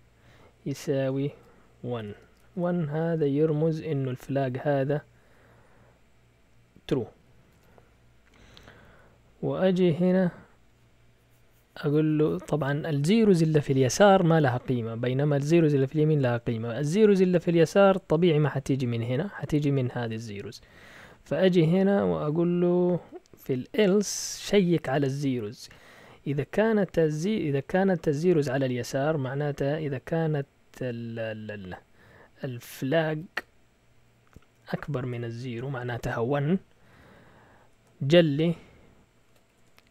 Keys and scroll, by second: 0.0-3.0 typing, 7.0-8.1 typing, 8.5 Down, 8.7 Down, 8.8 Down, 8.9 Down, 9.1 Down, 9.2 Down, 9.4 Down, 9.6 Down, 10.0 Down, 17.7 typing, 19.3-21.6 typing, 23.7-24.5 typing, 25.6 typing, 32.2-35.1 typing, 36.7 Right, 36.9 Right, 37.7 typing, 39.4 typing.